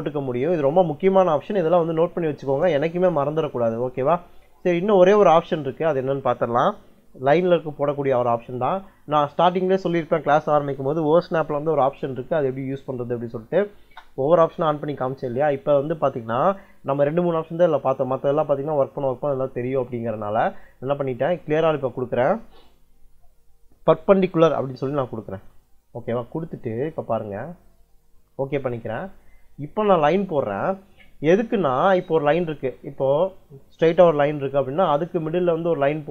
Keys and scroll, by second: 12.6 o, 12.8 s, 13.6 space.